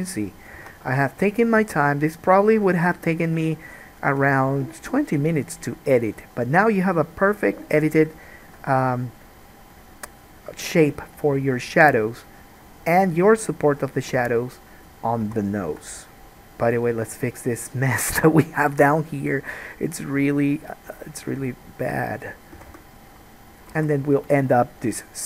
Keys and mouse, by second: 0.7 Tab, 1.8 alt+a, 8.7-14.2 right drag, 13.9-23.7 drag, 13.9 middle click, 14.2 Tab, 15.4 alt+a, 21.2 middle click, 21.2 right click, 22.7 g, 23.7 alt+right click, 23.9 alt+a, 24.0 click, 24.1 right click.